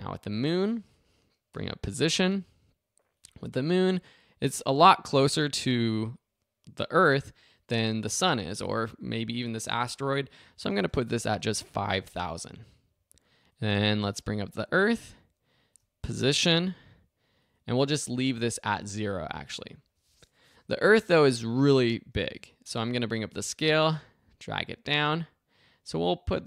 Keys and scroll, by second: 1.5 p, 10.4 5, 10.7 0, 11.6 Home, 16.4 p, 22.2 s.